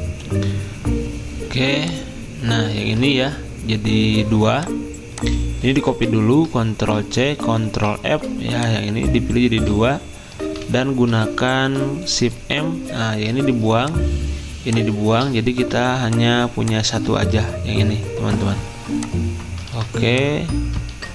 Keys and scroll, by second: 2.8 ctrl+z, 5.8 ctrl+z, 7.0 ctrl+c, 12.2 m, 17.2 ctrl+z, 19.7 ctrl+z, 21.0 ctrl+z.